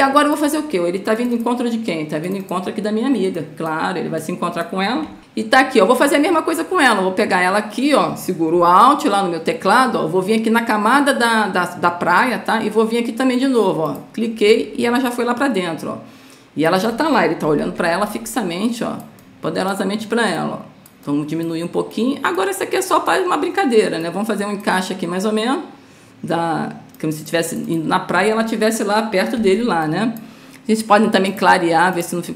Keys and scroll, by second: 17.8 ctrl+t.